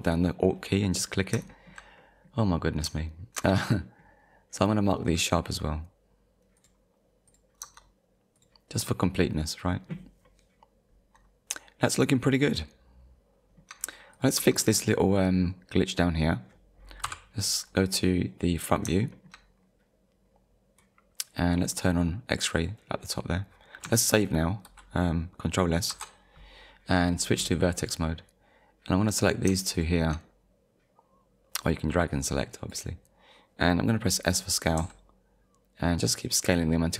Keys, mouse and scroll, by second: 1.1-1.5 scroll down 2, 1.5 shift+middle click, 2.0 middle click, 3.0 shift+middle click, 5.0 right click, 6.6 click, 7.3 click, 7.6 Tab, 8.4 click, 10.3 middle click, 12.1-12.4 scroll down 1, 12.6 middle click, 13.1 scroll up 1, 13.4 shift+middle click, 14.1 click, 14.4 Tab, 14.9 click, 15.4-15.8 scroll up 1, 17.0 KP_1, 18.3 scroll up 1, 19.1 shift+middle click, 19.6 scroll up 1, 22.6 click, 25.9 ctrl+s, 27.8 click, 29.0 click, 29.8 shift+click, 31.6 click, 34.8 s.